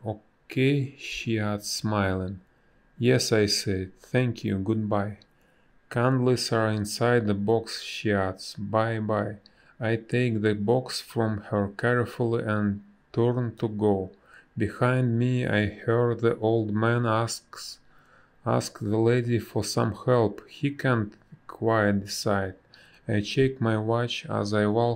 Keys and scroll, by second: 5.2 space, 10.3 space, 11.4 a, 13.9 Down, 24.4 space.